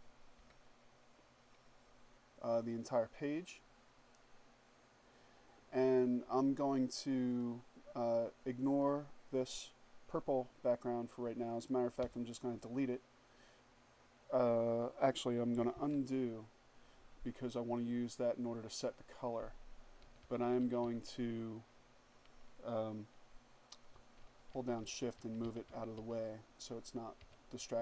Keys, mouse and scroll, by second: 6.4 click, 7.9 click, 11.2 Delete, 14.8 ctrl+z, 18.1 click, 19.1 Up, 23.3 shift+Up, 26.3 Up, 27.1 Up.